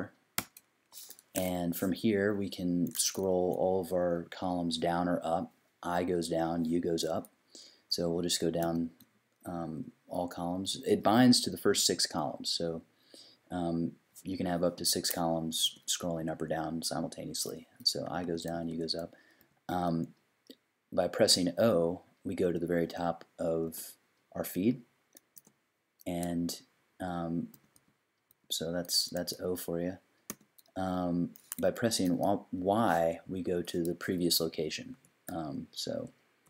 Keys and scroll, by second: 0.4 \, 8.6 i, 14.8 i, 15.6 u, 16.2 u, 17.8-19.7 typing, 23.7 o, 25.3 o, 27.5 i, 27.7 i, 28.3 i, 30.3 o, 34.9 y, 35.9-36.4 typing.